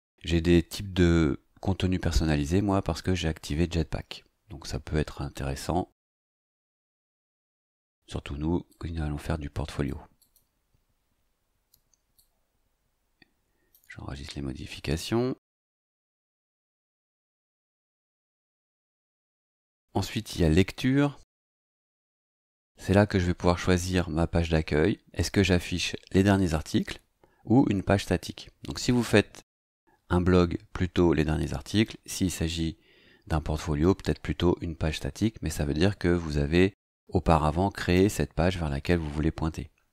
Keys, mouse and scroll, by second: 8.7-10.0 drag, 10.2 click, 12.1-13.9 drag, 18.9 click.